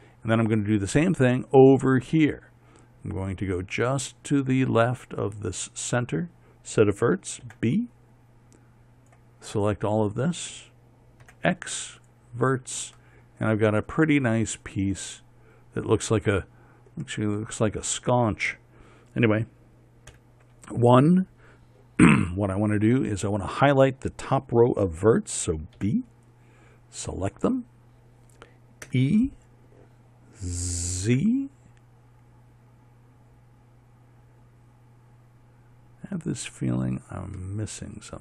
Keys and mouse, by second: 8.1 b, 11.9 x, 14.3-15.7 middle drag, 16.7 middle click, 17.7-20.8 middle drag, 20.8 KP_1, 26.5 b, 29.6 e, 38.1-38.2 middle drag.